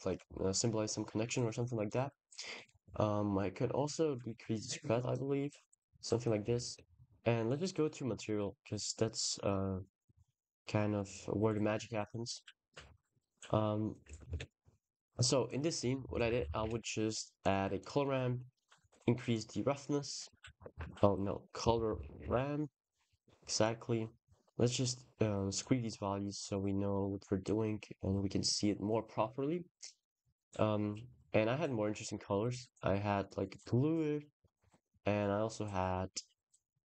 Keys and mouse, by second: 1.8 click, 3.3-6.1 drag, 6.5 ctrl+s, 8.2-10.2 drag, 10.7 click, 12.3 click, 14.2 ctrl+s, 14.8 click, 15.2 click, 17.6 click, 18.4 click, 20.4 click, 20.5 x, 20.8 click, 22.9 click, 24.0 click, 24.7-25.2 drag, 25.4-25.9 drag, 26.0 click, 26.7 click, 29.8 ctrl+s, 30.9 click, 33.9 click, 34.2 click.